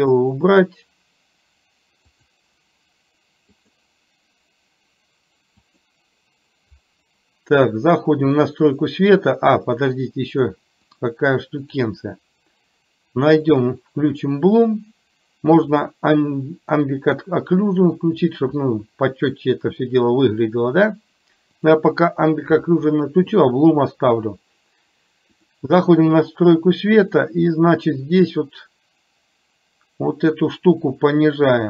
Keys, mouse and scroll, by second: 0.1 click, 2.3 click, 3.7 click, 5.7 click, 9.2 click, 11.7 click, 13.6 click, 25.6 click, 28.7-31.6 drag.